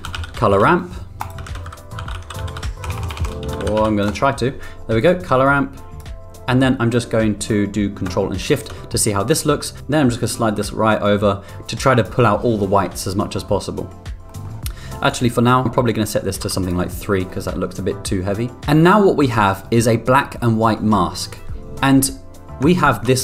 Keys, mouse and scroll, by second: 1.4 shift+a, 4.3 BackSpace, 5.5-6.0 drag, 8.4 ctrl+click, 8.9 middle click, 9.8-12.1 drag, 14.4 middle click, 15.9 click, 17.3-18.3 middle drag, 19.0 middle click, 22.8 ctrl+click.